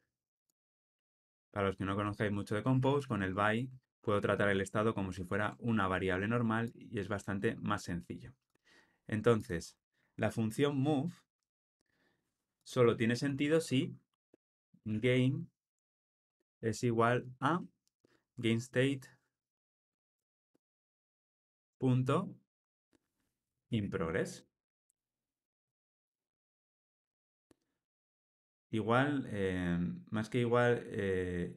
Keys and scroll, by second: 1.3 alt+Return, 2.8 super+z, 3.8 alt+Return, 24.5 Return.